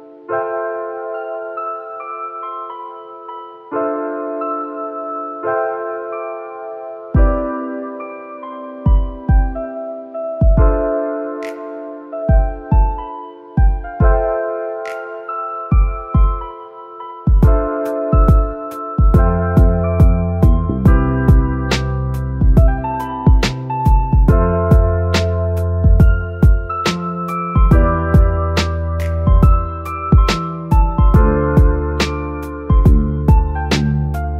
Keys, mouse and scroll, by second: 0.3-2.7 middle drag, 2.7 shift+click, 3.2 shift+click, 4.3 shift+click, 5.6 shift+click, 6.6 shift+click, 7.6 shift+click, 8.9 shift+click, 9.6-10.2 scroll up 2, 10.2-12.1 shift+middle drag, 12.1 c, 15.1 middle click, 16.1 shift+click, 16.9 shift+click, 18.3 shift+click, 19.2 scroll down 3, 19.4-22.1 middle drag, 22.1-28.5 drag, 28.5 middle click, 28.8-31.4 scroll up 3, 31.5-34.1 drag.